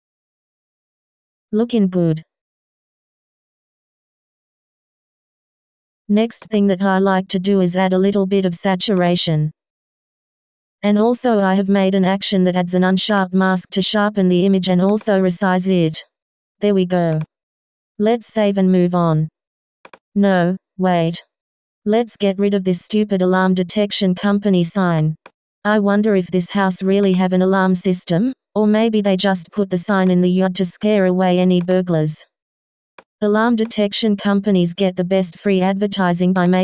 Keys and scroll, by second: 20.5 s, 23.6 s.